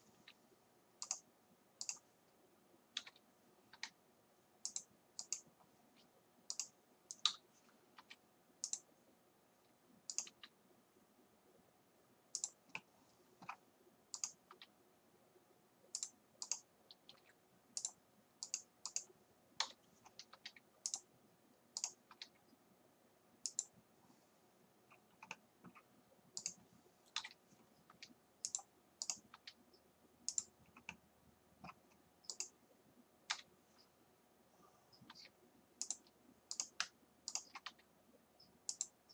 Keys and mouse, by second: 0.2 g, 3.0 KP_1, 3.8 r, 7.3 KP_3, 8.1 r, 10.3 g, 10.4 right click, 14.6-19.7 right drag, 14.6 r, 17.2 r, 19.7 KP_7, 20.4 r, 22.2 r, 27.2 KP_7, 27.9 r, 29.4 r, 32.9 right click, 33.3 KP_7, 33.4 right click, 35.1 r, 36.7 right click, 37.7 r.